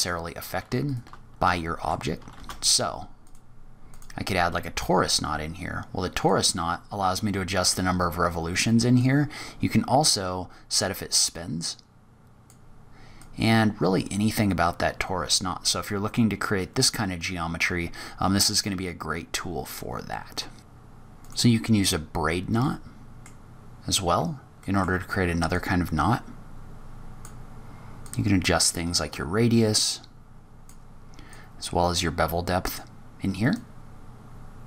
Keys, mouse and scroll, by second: 0.8 shift+right click, 1.4 middle click, 1.4 scroll up 3, 2.2 shift+a, 4.6-5.1 scroll down 2, 6.1 click, 8.9 click, 13.1 click, 20.1-20.5 scroll down 4, 20.5 scroll up 1, 21.9 scroll down 3, 22.5 middle click, 24.1-24.5 scroll up 2, 24.5 middle click, 25.4 click, 27.9 click, 31.2 click, 33.4 click.